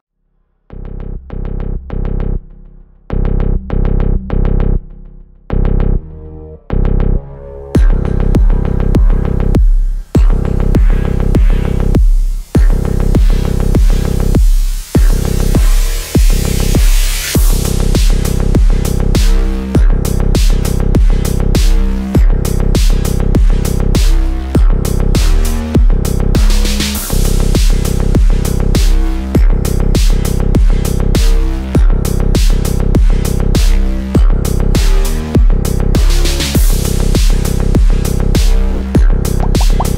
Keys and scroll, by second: 6.7 c, 7.0 e, 17.9 ctrl+r.